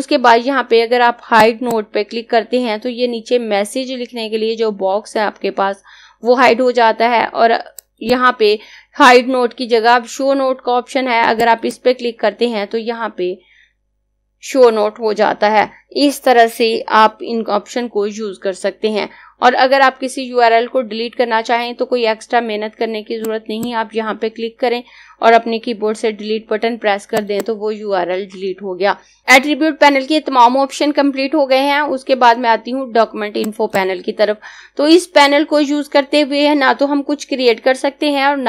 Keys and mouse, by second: 7.2 click, 10.7 click, 22.1 click, 24.7 Delete, 26.0 click, 28.8 click, 33.4 click.